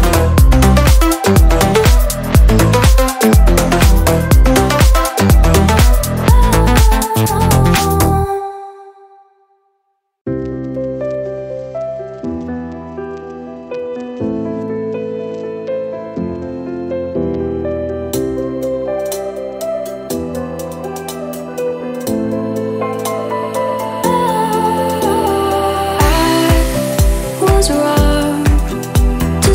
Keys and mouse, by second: 2.2-7.3 middle drag, 7.3-7.8 drag, 8.3-9.5 drag, 10.2-12.0 middle drag, 12.0-13.5 drag, 13.5 shift+d, 15.2-27.2 drag, 27.2 x, 28.0-29.5 drag.